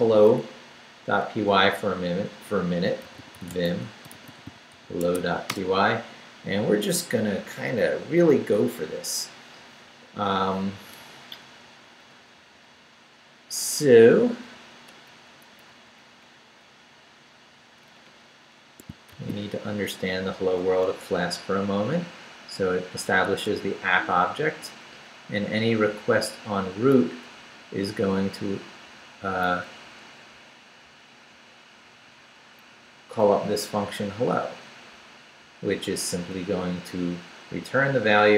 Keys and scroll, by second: 2.8-5.2 typing, 5.5 Return, 11.5 Down, 14.2 Up, 16.7 Down, 17.8 Up, 18.9 shift+Up, 19.1 shift+v, 19.4 shift+Down, 20.3 Down, 23.3 Escape, 23.9 Down, 25.4 Right, 27.5 Left, 29.2 Right, 30.0 Left, 31.1 Down, 31.9 Right, 33.3 Left, 35.6 Down, 36.2 Up.